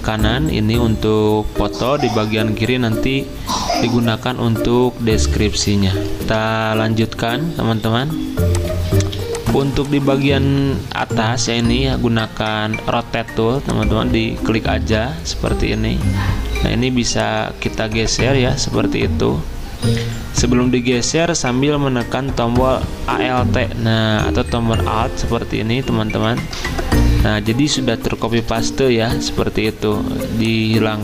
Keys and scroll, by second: 6.3 F10, 8.0 v, 9.0 z, 11.3 r, 28.4 d.